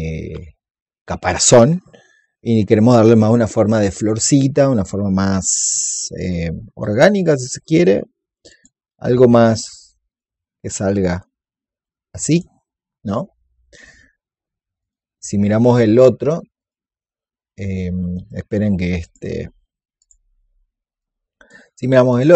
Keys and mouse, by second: 8.4-13.7 drag, 14.7-16.5 drag, 18.9 click.